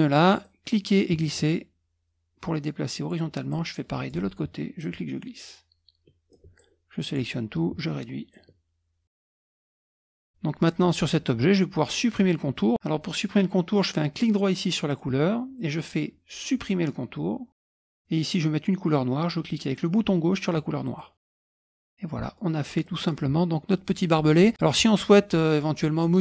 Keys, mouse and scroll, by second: 0.4-3.2 drag, 3.5 click, 4.8-7.4 ctrl+drag, 8.3-9.4 ctrl+drag, 9.4 middle click, 9.4 ctrl+scroll down 1, 9.7 ctrl+middle click, 9.9 click, 10.2 click, 14.9 right click, 17.6 click, 20.8 click, 21.3 click, 21.4 middle click, 21.4 scroll up 1, 21.8 click, 22.2-23.9 middle drag, 24.5 middle click.